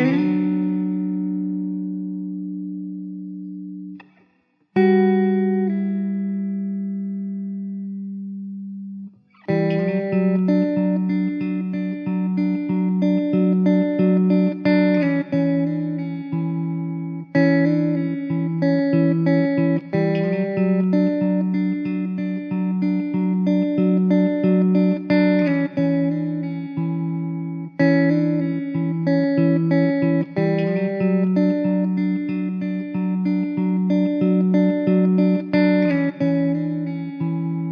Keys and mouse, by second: 1.7 alt+w, 2.4 middle click, 4.2 2, 11.8 alt+w, 17.4 alt+w, 18.9 alt+middle click, 24.4 alt+w, 25.9-26.7 typing, 31.2 middle click.